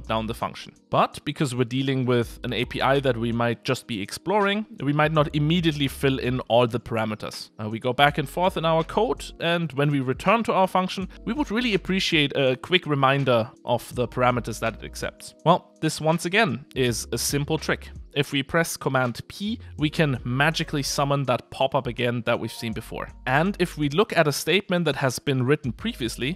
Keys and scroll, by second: 18.7 super+p, 23.2 Escape.